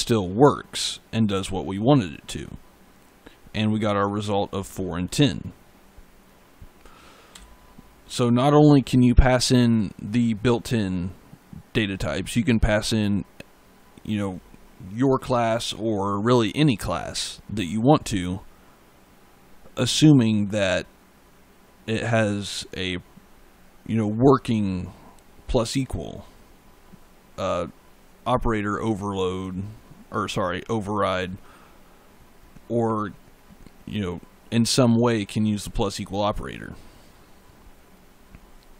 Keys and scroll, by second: 7.2 e.